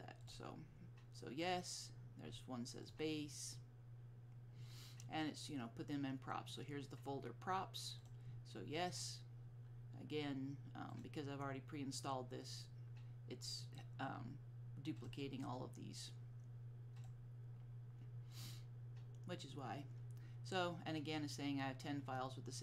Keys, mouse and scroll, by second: 0.3 click, 2.9 click, 8.1 click, 11.0 click, 15.1 click.